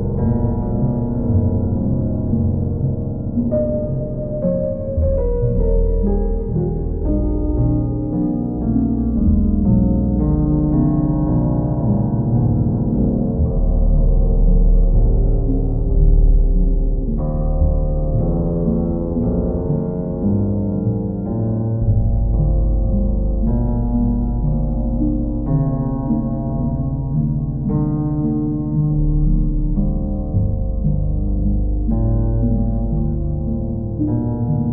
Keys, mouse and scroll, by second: 1.0 click, 2.1 click, 2.5 shift+click, 3.5 click, 4.6 ctrl+click, 6.6 click, 6.9 shift+click, 9.1 click, 9.9 click, 10.8 click, 11.5 ctrl+click, 11.7 ctrl+z, 11.7 ctrl+click, 12.2 ctrl+z, 13.3 click, 13.7 click, 14.2 click, 14.7 shift+click, 15.5 shift+click, 17.5 ctrl+click, 18.4 click, 19.2 click, 21.7 click, 22.9 click, 25.0 click, 26.1 ctrl+click, 26.6 click, 28.2-29.2 drag, 30.2-31.3 drag, 32.5 ctrl+click, 33.7 ctrl+click.